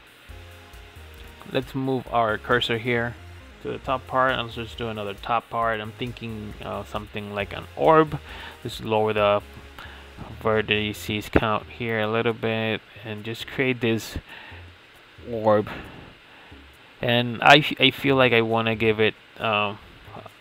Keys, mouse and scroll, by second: 1.8 shift+a, 5.7-10.2 drag, 10.2 Tab, 11.2 s, 13.2 g, 16.8-17.6 middle drag, 17.6-18.5 right drag, 18.5 Tab, 18.9-20.4 right drag.